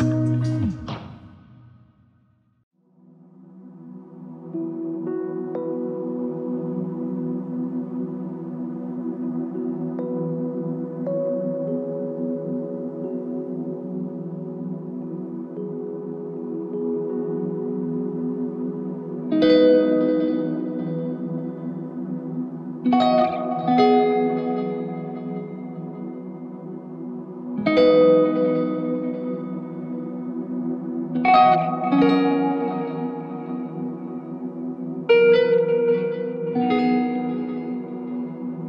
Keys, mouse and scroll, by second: 0.7 alt+c, 1.1 ctrl+z, 5.0 ctrl+shift+click, 6.4 ctrl+shift+click, 9.1 ctrl+shift+click, 16.2 ctrl+z, 19.1 ctrl+shift+click, 26.6 ctrl+s, 29.2 ctrl+shift+click, 31.7 ctrl+shift+click.